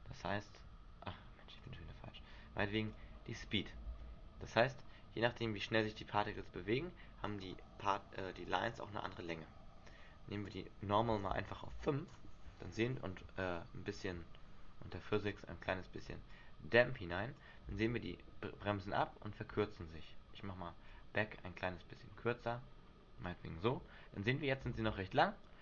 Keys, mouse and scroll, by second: 1.0 Escape, 1.8 click, 3.1 click, 4.0 alt+a, 5.0-5.5 scroll down 5, 5.4-6.0 scroll up 4, 5.5 Escape, 6.5 right click, 10.6 click, 15.5 click, 16.5 click, 18.0 alt+a, 19.7 Escape, 21.1 click, 24.5-24.9 scroll up 1, 24.9 alt+a.